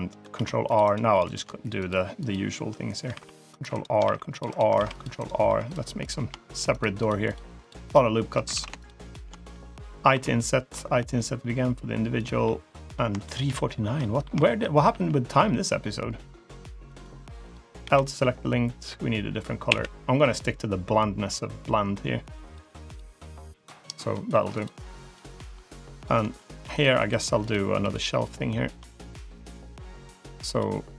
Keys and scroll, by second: 0.2 ctrl+r, 1.0 3, 3.0 ctrl+r, 3.9 ctrl+r, 4.6 ctrl+r, 5.3 3, 8.4 ctrl+z, 10.0 i, 14.8 e, 17.7 l, 19.5 g.